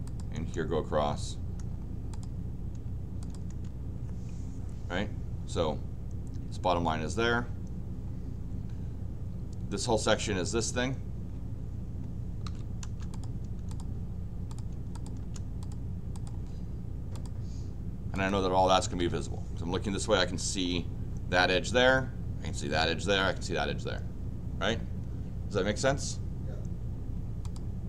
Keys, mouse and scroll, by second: 0.3 Return, 1.5 Return, 2.1 click, 3.5 Return, 12.1-12.9 typing, 13.1 click, 13.7 click, 14.5 click, 14.9 click, 15.2 Return, 15.6 click, 16.2 click, 17.1 click, 18.1 click, 18.7 Escape, 19.0 Escape, 27.5 click.